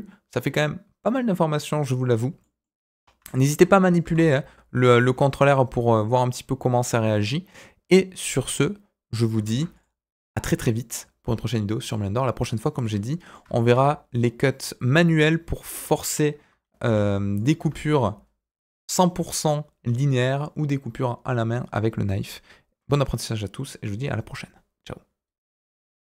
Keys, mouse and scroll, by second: 2.4 middle click, 2.7 scroll up 2, 3.1 Tab, 4.0 ctrl+r, 9.4 ctrl+r, 12.8 middle click, 13.5 shift+middle click, 14.5 click, 15.6 alt+click, 16.8 e, 17.5 Tab.